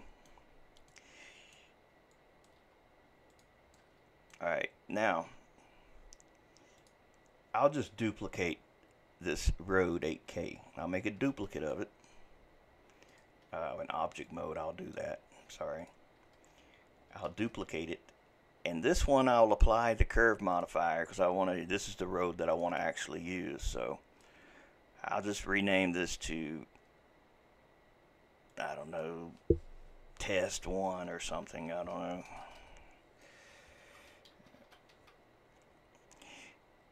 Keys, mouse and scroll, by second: 0.5-0.9 scroll down 3, 0.9-2.1 middle drag, 2.1 click, 2.6 g, 3.7-6.8 middle drag, 6.8 click, 11.3 shift+d, 13.5 Escape, 14.3-15.9 drag, 17.3 shift+d, 20.5-22.6 drag, 22.7-25.8 drag, 31.1 Right, 31.3 Right, 31.6 Right, 32.3 BackSpace, 32.4 BackSpace.